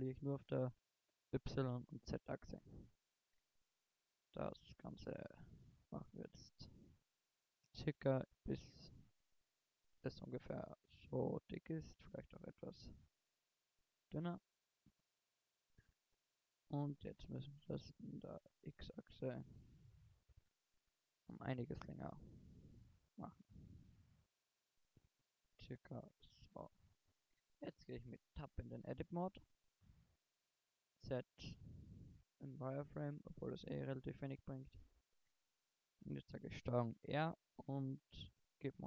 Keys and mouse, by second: 2.7-3.1 middle drag, 3.1 KP_1, 4.3 s, 9.0 middle click, 9.2 click, 9.9 middle click, 11.1 shift+s, 12.4 s, 14.9 s, 15.1-15.9 drag, 16.7 s, 18.4 s, 20.0 click, 20.5 click, 21.3 click, 21.4 click, 21.7 click, 23.1 s, 25.7 s, 26.7 Tab, 30.8 z, 33.2 z, 35.3 a, 36.8 ctrl+r.